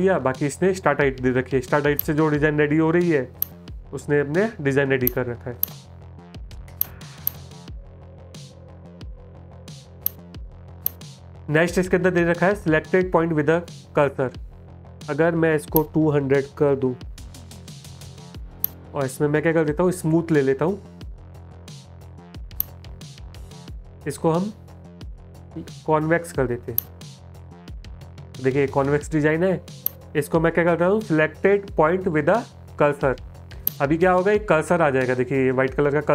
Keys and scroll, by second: 0.6 space, 2.0 space, 3.8 space, 8.9 space, 16.1 BackSpace, 28.3 space.